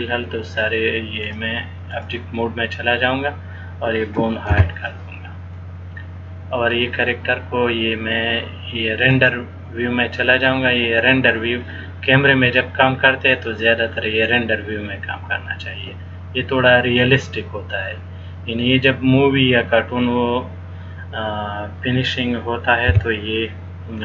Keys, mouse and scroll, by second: 1.4 click, 5.7 middle click, 9.4 click, 17.8 scroll down 1, 18.9-20.3 scroll down 2, 20.3-21.0 scroll up 1.